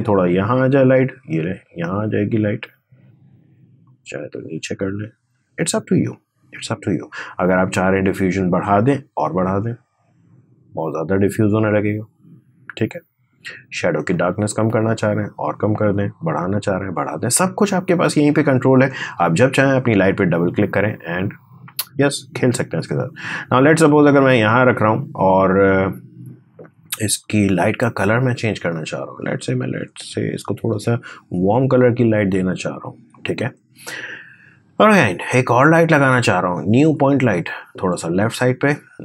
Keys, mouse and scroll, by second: 7.6-13.0 drag, 13.9-18.7 drag, 22.9-30.6 drag, 35.9 right click, 36.7-39.0 drag.